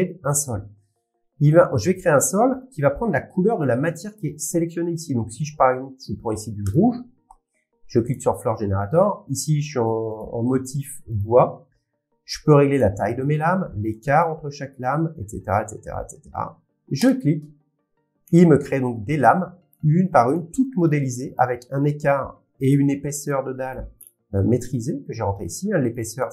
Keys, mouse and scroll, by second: 1.2 middle click, 6.7 click, 8.1 click, 10.2 click, 12.8 click, 14.2 click, 16.0 scroll, 17.1 click, 17.1 middle click, 18.3 middle click, 20.0-21.4 scroll, 22.5 shift+scroll, 22.8 shift+middle click, 23.9 middle click, 24.3 scroll, 25.9 click, 25.9 scroll.